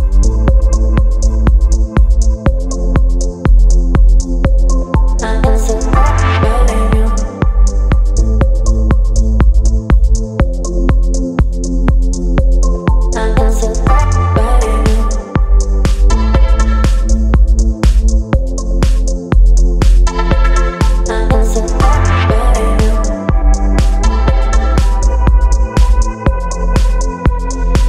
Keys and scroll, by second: 18.3 ctrl+j.